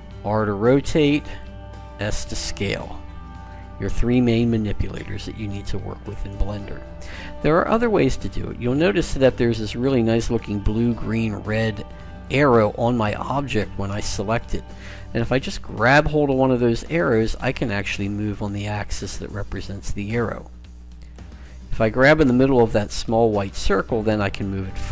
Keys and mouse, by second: 0.0 r, 1.7 s, 8.8-10.6 right drag, 15.6 click, 18.9 click, 21.0 click, 23.5 click.